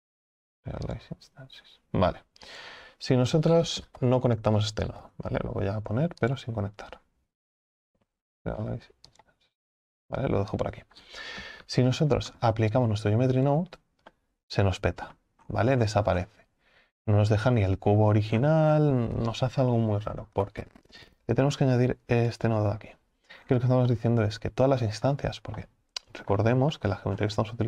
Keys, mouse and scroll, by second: 1.0 shift+a, 4.0 ctrl+z, 13.5 click, 14.1-15.4 middle drag, 15.4-18.1 scroll up 19, 18.1 scroll up 1, 18.3-18.9 scroll down 15, 20.4 ctrl+z, 22.4 click, 23.4-23.8 scroll down 6, 23.8 scroll up 1, 24.0-27.6 middle drag.